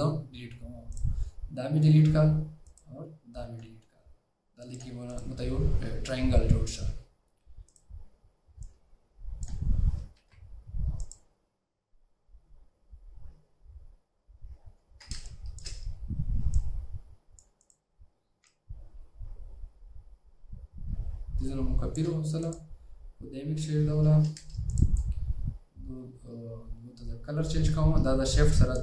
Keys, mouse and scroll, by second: 8.7 shift+click, 10.3 ctrl+z, 15.1 alt+scroll down 1, 15.3 space, 18.6 alt+click.